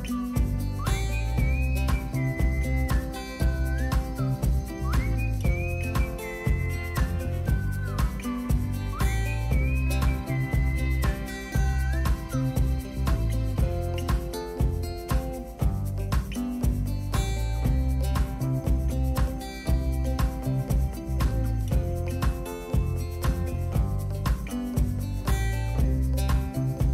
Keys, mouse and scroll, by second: 0.0-8.7 drag, 9.3-13.3 drag, 13.9-15.9 drag, 21.2 click, 23.7 click, 25.1-26.9 drag.